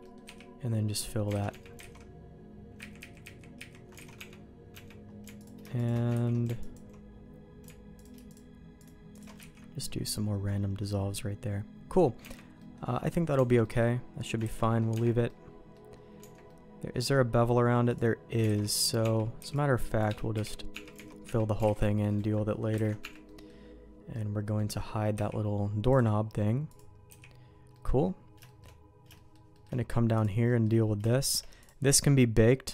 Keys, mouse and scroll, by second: 0.0 middle click, 0.2 f, 1.3 alt+a, 1.5 Tab, 1.8 alt+a, 2.8 ctrl+z, 3.0 ctrl+z, 3.2 ctrl+z, 3.5 ctrl+z, 4.0 alt+a, 4.1 Tab, 4.7 Tab, 5.3 alt+click, 5.8 alt+shift+click, 6.1 ctrl+x, 6.6 alt+click, 8.2 alt+shift+click, 9.4 ctrl+x, 9.8 middle click, 10.8-11.9 middle drag, 12.2 Tab, 12.5 middle click, 12.9 middle click, 13.3 Tab, 13.6 middle click, 14.4 ctrl+s, 14.6 middle click, 14.9 Tab, 15.2 middle click, 16.2 Tab, 16.4 middle click, 17.8 click, 18.4 alt+a, 19.0 Tab, 19.3 c, 20.3 f, 20.7 Tab, 21.2 Tab, 21.6 alt+a, 22.7 ctrl+s, 23.0 Tab, 23.2 middle click, 24.1 middle click, 25.1 h, 25.9 click, 26.6 click, 27.0 h, 27.7 middle click, 28.4 shift+middle click, 29.1 shift+middle click, 29.5 shift+middle click, 30.1 click, 30.4 middle click, 31.0 shift+middle click, 31.6-32.7 drag.